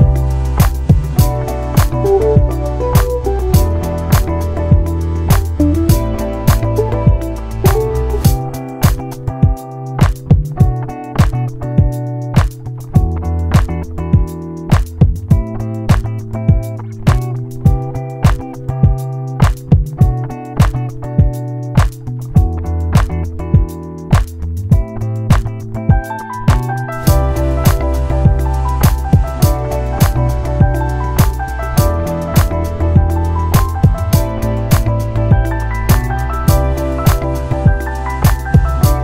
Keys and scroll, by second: 14.2 ctrl+0, 20.5 ctrl+c, 22.1 ctrl+shift+v.